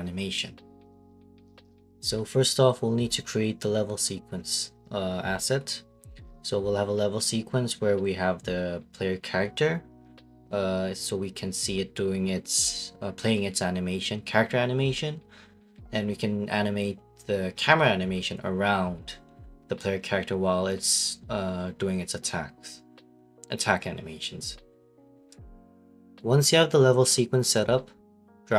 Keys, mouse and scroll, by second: 7.4-8.0 typing, 9.2-11.4 typing, 17.7 right click, 19.0 right click, 20.3 right click, 23.3 ctrl+space, 23.3 click, 24.0 click, 24.7 click, 24.9 click, 25.8 click, 26.3 click, 27.2 click, 27.3 click, 27.9 click, 28.0 click.